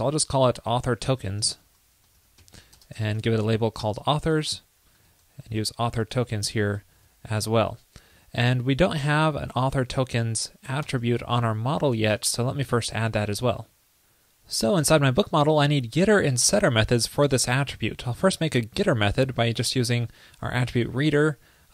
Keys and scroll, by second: 5.2 alt+Left, 8.5 super+Right, 11.0 ctrl+Left, 11.9 super+Right, 12.1 super+s.